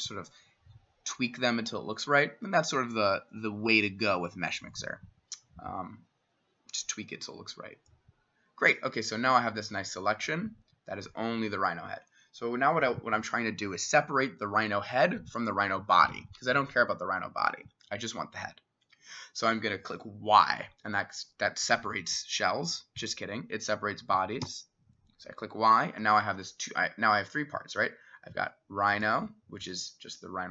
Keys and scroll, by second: 24.9 y.